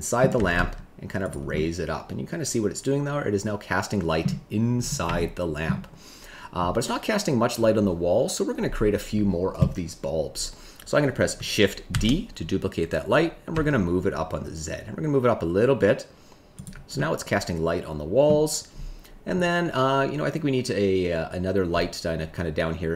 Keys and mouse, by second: 0.3 g, 0.5 z, 1.5-4.2 middle drag, 5.1 shift+middle click, 11.9 shift+d, 13.5 z, 16.9-18.2 middle drag.